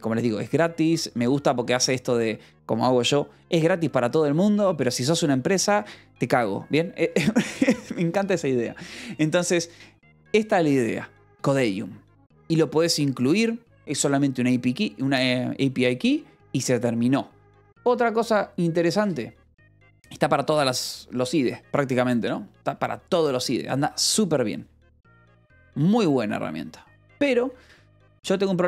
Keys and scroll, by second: 22.8 ctrl+=.